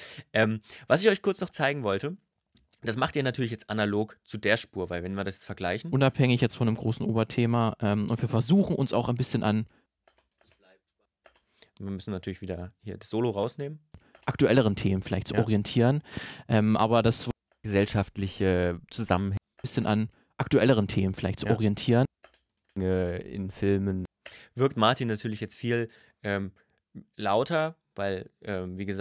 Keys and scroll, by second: 5.6 space, 9.6 space, 13.7 space, 17.1 space, 19.1 space, 21.9 space, 23.8 space.